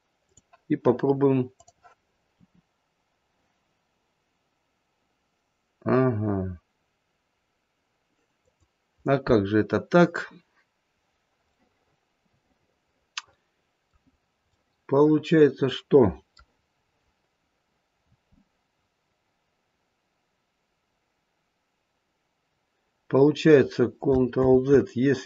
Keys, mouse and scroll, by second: 1.5 click, 2.7 r, 11.5 middle click, 13.6 middle click, 14.0-16.5 scroll down 2, 14.3 middle click, 16.5-17.4 scroll up 3, 17.6-18.7 scroll up 1, 18.7-19.8 scroll down 2, 24.4 ctrl+z.